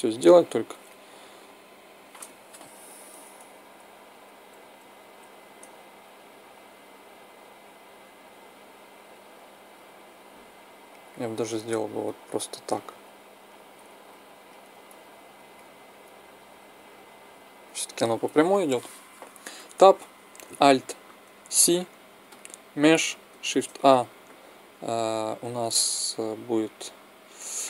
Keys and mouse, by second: 3.1 middle click, 12.0 click, 12.7-14.4 middle drag, 14.5 click, 17.3 click, 19.3 Tab, 21.2 alt+c, 23.2 shift+a.